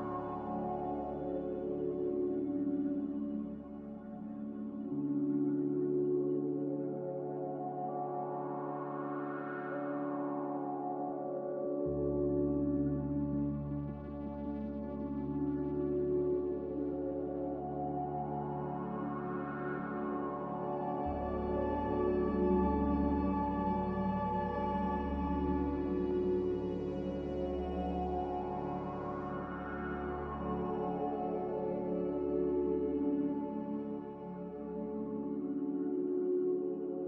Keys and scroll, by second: 16.1 q, 20.1 F9, 21.4 typing, 21.7 Return, 23.8 q.